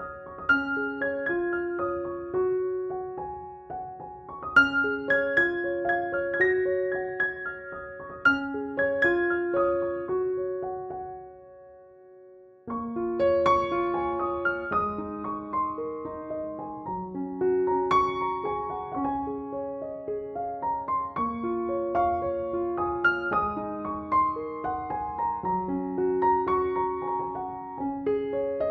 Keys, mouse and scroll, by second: 0.0-1.8 typing, 0.1 ctrl+drag, 0.4 ctrl+=, 1.0-1.8 drag, 2.0 drag, 3.1 [, 3.3-3.8 click, 3.8 [, 3.8-4.9 drag, 6.2-9.5 typing, 6.5-6.8 click, 7.3-7.9 click, 8.0 click, 8.6 click, 9.0-9.3 click, 9.6-11.0 drag, 11.0 ], 11.1-12.9 click, 11.5 ], 11.5-13.0 drag, 13.2 [, 13.3 [, 13.4 [, 13.6-14.3 drag, 14.5-14.9 drag, 14.9-23.9 typing, 15.6-15.9 drag, 16.7 click, 17.1-17.6 click, 17.8-18.6 click, 18.1 click, 18.8 click, 19.4 click, 19.8-20.4 click, 20.7 click, 21.5 click, 21.8-22.4 click, 22.7 click, 22.9 ctrl+-, 23.4 click, 23.5 ctrl+=, 24.0-25.0 click, 24.6 click, 25.1-28.7 typing, 25.3-25.7 click, 25.7-26.2 click, 26.2 click, 26.6 ctrl+-, 27.0 click, 27.6-28.0 click, 28.2-28.7 click.